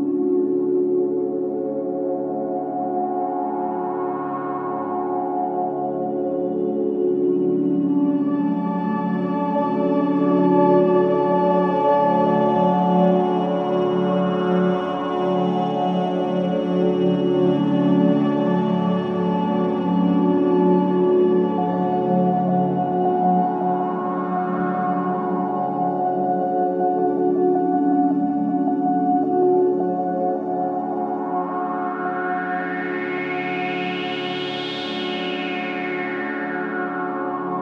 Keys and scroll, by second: 4.3 ], 4.8 ], 12.3 4, 16.0 F1, 18.1 1, 23.7 4, 28.2 3, 31.4 4.